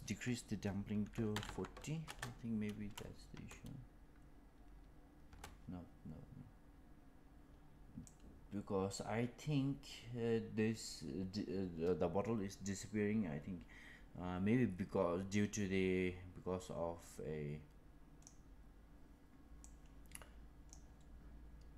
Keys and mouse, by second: 3.2 space, 5.2 space, 8.1-18.3 drag, 19.5-20.6 drag.